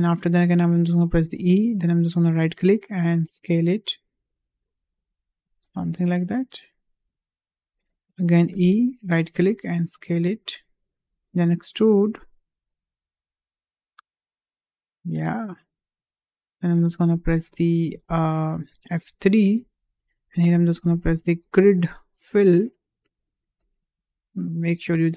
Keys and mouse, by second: 1.1 e, 3.0 s, 6.0 click, 6.3-7.6 drag, 8.4 e, 9.4 s, 11.0 e, 14.9-15.9 middle drag, 19.5 F3, 24.5 2.